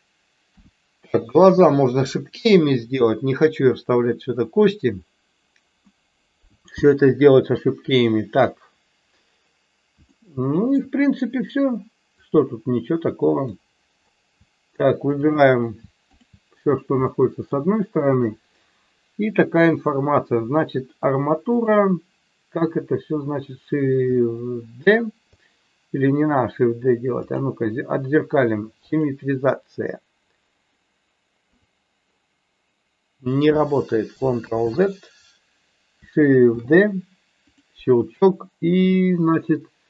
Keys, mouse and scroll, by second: 0.4 KP_1, 10.2 shift+middle click, 12.2-13.4 drag, 15.2 shift+click, 16.1 shift+click, 17.1 shift+middle click, 21.6 click, 27.2-29.0 drag, 34.4 ctrl+z, 36.6 shift+d, 37.5 click, 38.9-39.8 drag.